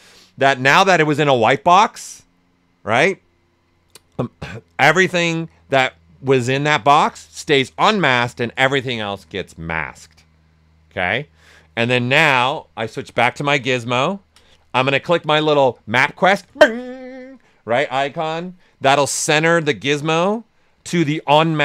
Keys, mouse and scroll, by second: 11.8 right click, 13.0 w, 13.5 alt+right click, 18.1 click, 18.7 right click, 20.0-21.6 right drag.